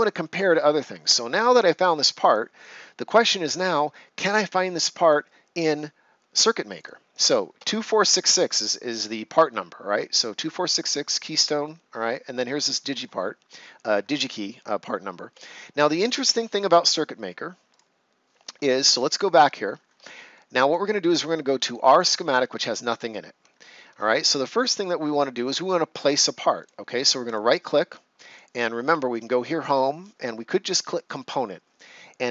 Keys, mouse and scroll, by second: 6.6 click, 8.4 click, 17.6 click, 20.3 right click, 21.8 click, 23.4 ctrl+scroll up 1, 24.3 ctrl+scroll down 1, 24.7 right click, 26.5 click, 27.2 right click, 28.2 click.